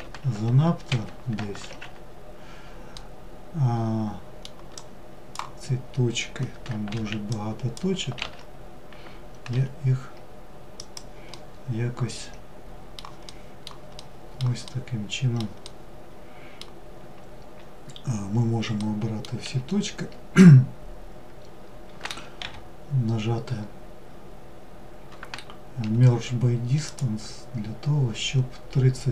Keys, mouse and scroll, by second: 2.1-3.9 middle drag, 3.9 drag, 10.6-17.8 middle drag, 18.0 middle click, 18.7 a.